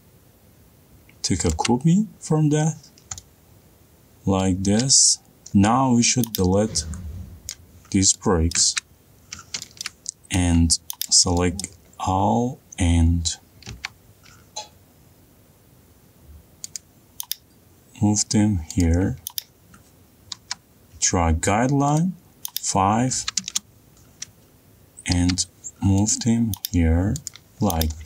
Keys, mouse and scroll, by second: 2.1 ctrl+click, 5.0 middle click, 5.5 middle click, 5.5 click, 8.1 click, 9.1 middle click, 9.1 click, 9.2 Delete, 9.9 middle click, 10.4 shift+middle click, 11.6 click, 12.5 middle click, 12.5 middle click, 13.0 middle click, 13.2 middle click, 14.3 m, 17.4 click, 19.4 click, 19.6-20.6 scroll, 20.6 scroll, 21.0 t, 22.6 click, 23.7 5, 24.0 Return, 25.8 m, 26.7 click, 27.9 click.